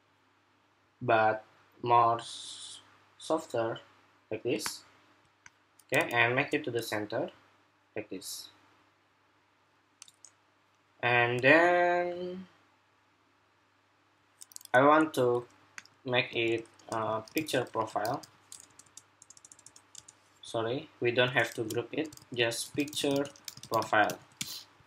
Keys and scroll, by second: 16.2 super+g, 16.7 super+r, 18.0 super+r, 21.2 shift+super+g, 22.0 super+r, 23.3 super+r.